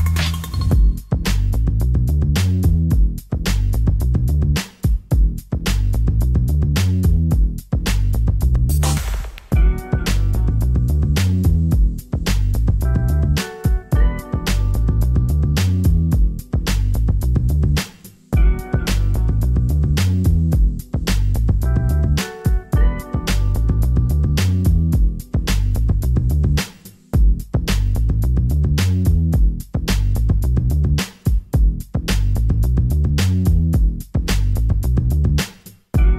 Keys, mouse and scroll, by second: 0.9 middle click, 1.4 z, 10.3 z.